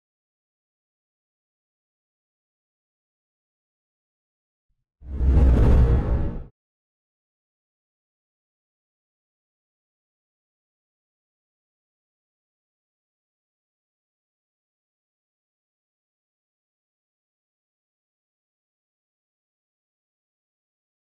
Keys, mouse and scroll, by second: 2.0-5.0 alt+drag, 6.4 space, 7.0 click, 7.7 ctrl+z, 7.9-8.3 ctrl+scroll up 2, 8.7-13.0 alt+drag, 13.0 scroll up 1, 13.7-15.5 drag, 15.7 scroll up 1, 15.9 space, 16.0 click, 16.4 space, 16.9-18.8 drag.